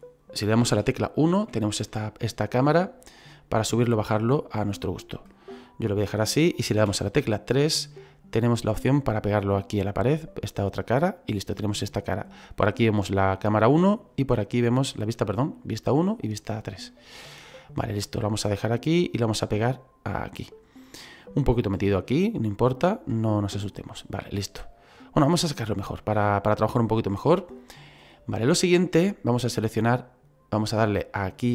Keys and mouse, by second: 0.7 KP_1, 1.9 shift+middle click, 3.3 click, 6.8 KP_3, 8.8 click, 11.3 middle click, 16.9 middle click, 18.3 click, 19.7 click, 22.5 click, 23.2 middle click, 24.7 click, 26.0 middle click, 27.7 middle click, 28.4 shift+middle click, 29.3 right click.